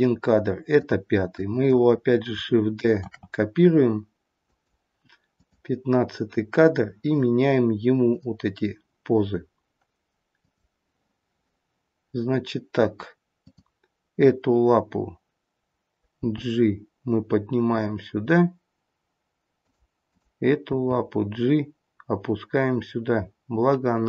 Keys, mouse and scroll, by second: 0.8 click, 1.3 click, 3.1 shift+d, 5.4 click, 8.1 click, 10.4 click, 13.2 click, 16.2 g, 20.1 click, 21.0 g.